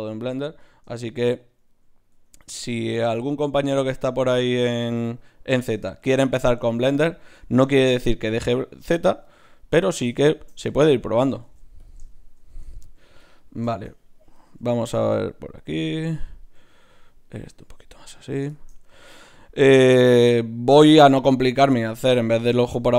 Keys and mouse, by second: 0.3 Tab, 2.1 Tab, 2.8-5.5 drag, 2.8-4.2 right drag, 4.2 Tab, 4.8 right click, 9.4-11.2 right drag, 11.4 ctrl+Tab, 13.3-15.2 drag, 14.6 g, 15.6-20.5 drag, 15.7 g, 16.5 g, 17.3 g.